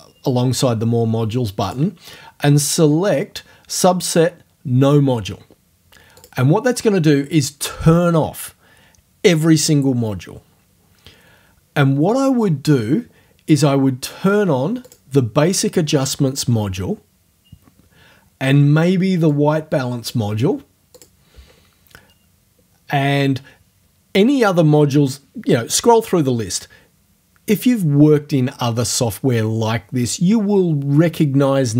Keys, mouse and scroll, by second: 1.6 click, 6.2 click, 14.8 click, 19.3 click, 21.0 click.